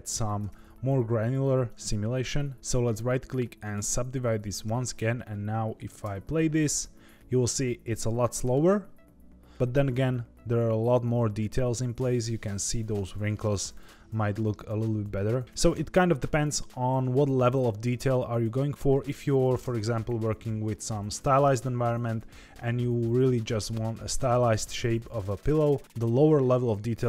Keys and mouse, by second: 0.3 Tab, 1.8 right click, 2.5 Tab, 2.9 right click, 4.8 Tab, 5.9 space, 19.6 space, 25.8 middle click.